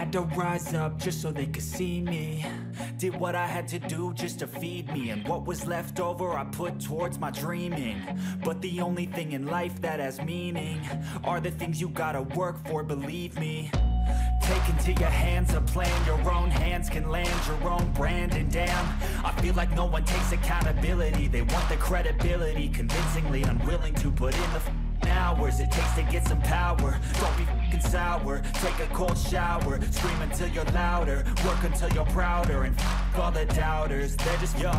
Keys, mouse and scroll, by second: 19.0-20.6 scroll down 14, 21.1-21.7 scroll down 6, 22.3-22.9 scroll down 3, 28.2 scroll up 1, 29.0-29.9 scroll up 4, 31.4 scroll up 1.